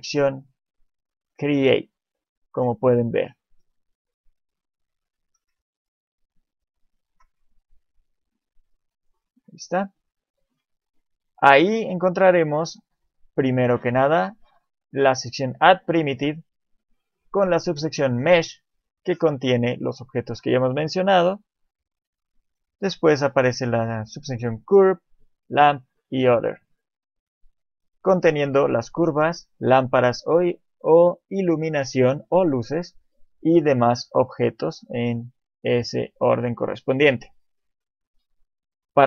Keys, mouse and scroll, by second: 5.7 ctrl+middle click, 8.1 click, 21.9 click, 24.2 click.